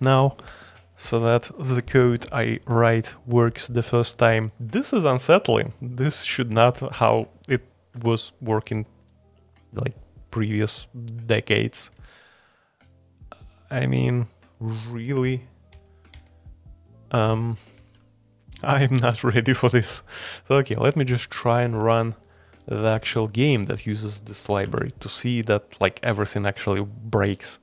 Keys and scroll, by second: 15.7 shift+Page_Up, 16.1 shift+Page_Up, 17.1 shift+Page_Down, 17.3 shift+Page_Down, 17.7 shift+Page_Down, 21.0 super+k, 22.8 alt+2, 23.5-24.5 j, 24.6 a.